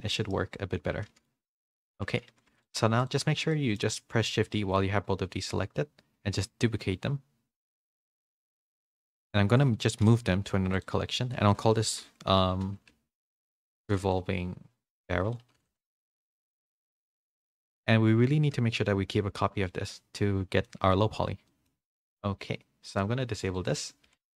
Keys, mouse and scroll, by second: 0.3 middle click, 1.8 ctrl+z, 2.2 a, 3.5 middle click, 3.5 a, 7.4 shift+d, 13.4 BackSpace, 20.6 middle click, 21.4 middle click, 23.5 click.